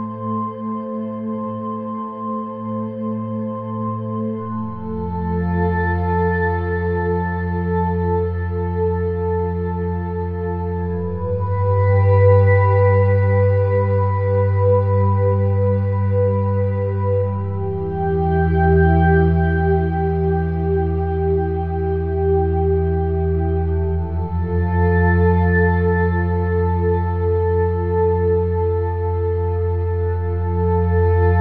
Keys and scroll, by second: 2.3 -.